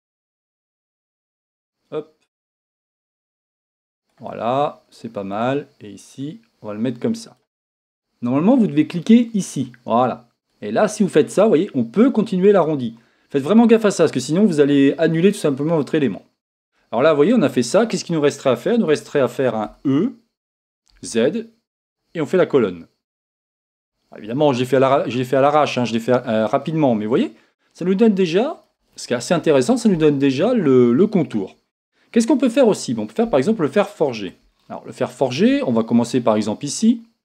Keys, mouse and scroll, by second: 1.8-4.4 drag, 5.5-7.4 drag, 10.7-16.7 drag, 19.7 e, 26.5-37.2 middle drag, 28.7-29.3 scroll up 2, 29.3 KP_1, 35.9-37.2 scroll up 2.